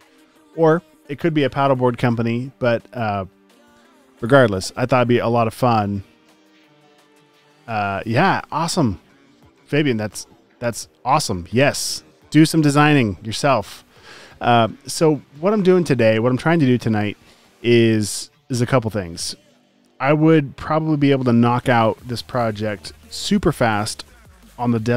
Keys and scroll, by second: 11.1 typing.